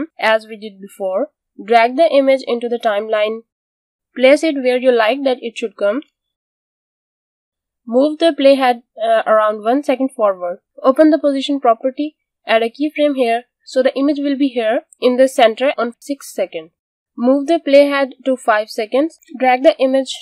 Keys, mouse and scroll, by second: 8.2 click, 11.9 p, 13.3 click.